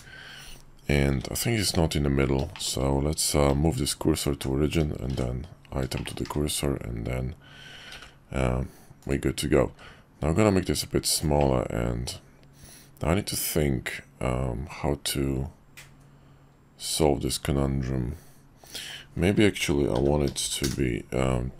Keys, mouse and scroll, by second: 1.1 `, 2.6 shift+click, 3.5 shift+s, 5.9 shift+click, 6.2 `, 7.9 g, 9.7 s, 11.5-18.9 drag, 19.6 r.